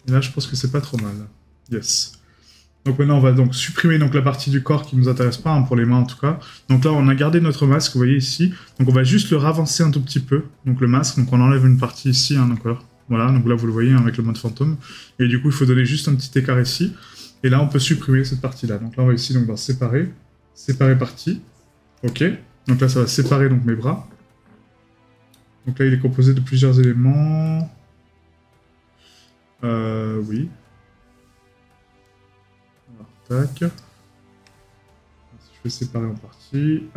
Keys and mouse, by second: 7.8 right click, 13.9 right click, 17.0 right click, 29.3 right click.